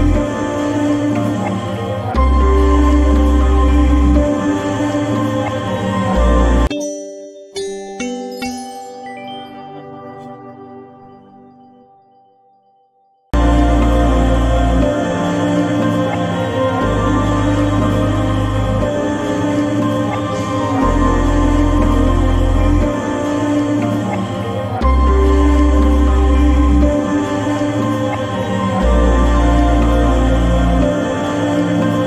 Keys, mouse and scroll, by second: 0.6-6.6 drag, 13.3-15.5 drag, 15.5-18.4 drag, 16.0 typing, 21.0 click, 21.0 typing, 21.0-24.0 drag, 25.6 click.